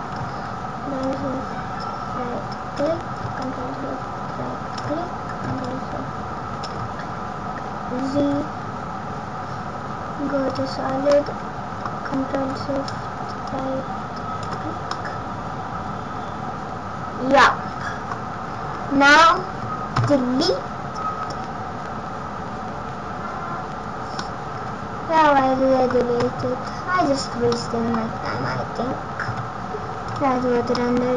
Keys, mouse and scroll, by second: 0.9 ctrl+shift+Right, 3.3 ctrl+shift+Right, 5.6 ctrl+shift+Right, 8.1 z, 11.1 middle click, 13.5 ctrl+shift+Right, 14.8 middle click, 18.6-19.1 scroll down 4, 19.0 scroll up 3, 19.8 scroll up 1, 19.9 Delete, 24.1 middle click, 26.1 Tab, 26.6-27.1 scroll down 9, 27.4 middle click, 27.9-28.4 scroll down 1, 29.1 z, 30.6 scroll up 1, 30.7 middle click.